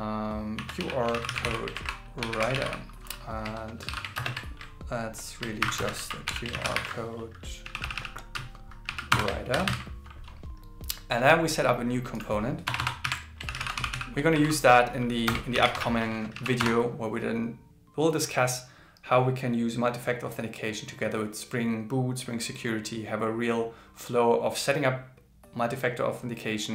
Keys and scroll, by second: 1.1 shift+c, 1.8 shift+w, 3.8 shift+8, 5.6 shift+0, 6.0 shift+q, 6.5 shift+c, 9.3-10.2 typing, 13.0 alt+l, 13.5 shift+c, 14.5 shift+o.